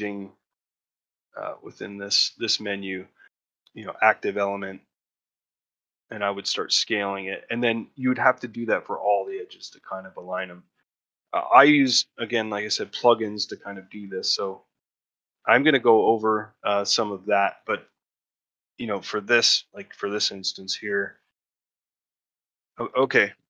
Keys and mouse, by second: 4.2 middle click, 4.6 shift+middle click, 4.9 middle click, 5.6 shift+middle click, 10.0 middle click, 10.5 ctrl+middle click, 10.8 middle click, 11.2 shift+middle click, 12.7 middle click, 13.3 middle click, 13.7 shift+middle click, 14.0 middle click, 14.8 shift+middle click, 15.3 ctrl+middle click, 17.6 click, 18.8 click, 19.8-22.7 middle drag.